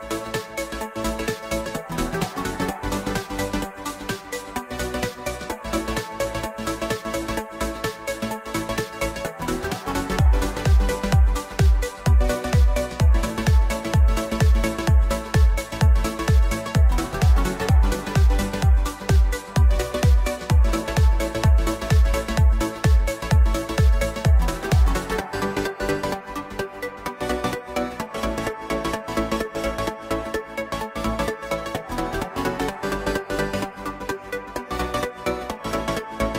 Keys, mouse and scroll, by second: 1.8 Tab, 12.8 KP_0, 25.9-36.3 drag.